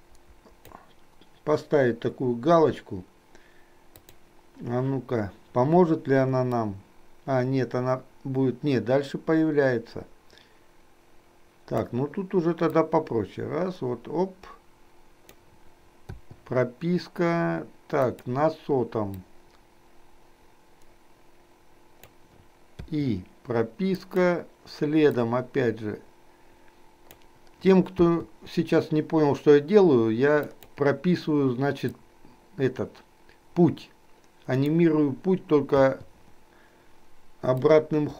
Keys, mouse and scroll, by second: 6.7-11.9 drag, 12.9-15.6 drag, 16.3 i, 18.1 click, 19.1-22.3 drag, 22.8 i, 24.1 click, 25.3-27.3 drag, 30.6 click, 32.2-34.9 drag, 35.9 i, 37.7-38.1 drag.